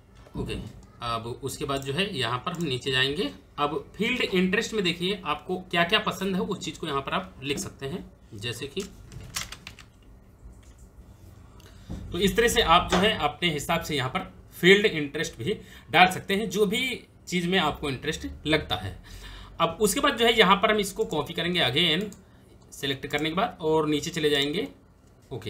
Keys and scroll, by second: 3.4 Return, 8.6-10.5 typing, 10.6 Return, 25.0 Return, 25.2 ctrl+v.